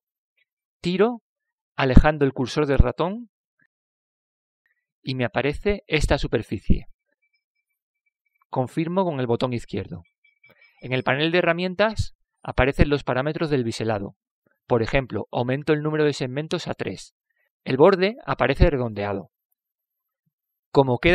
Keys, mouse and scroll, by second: 0.0 w, 11.3-13.1 middle drag, 17.3-19.7 drag, 18.7-20.5 middle drag.